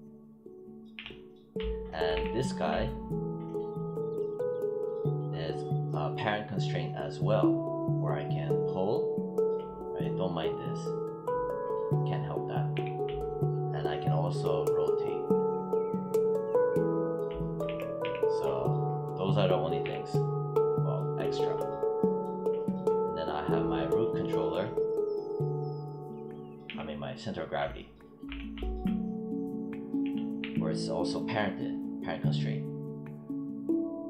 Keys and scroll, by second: 0.8 z, 2.1 w, 12.6 e, 17.6 z, 26.5 z, 28.2 e.